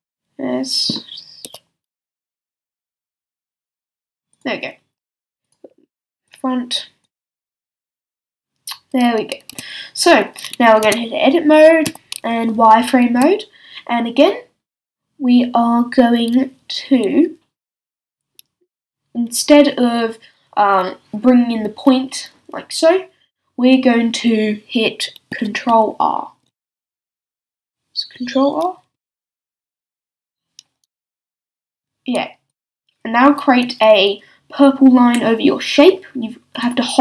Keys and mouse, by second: 1.4 s, 3.3-4.4 middle drag, 9.5 a, 10.8 Tab, 11.8 z, 13.1 a, 26.0 r, 28.9 ctrl+r, 36.6-37.0 drag.